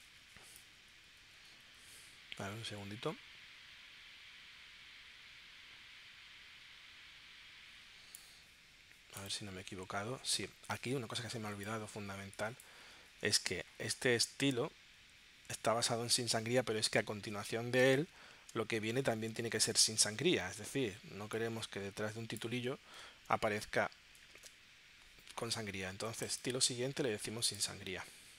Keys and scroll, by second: 24.6 super+Tab.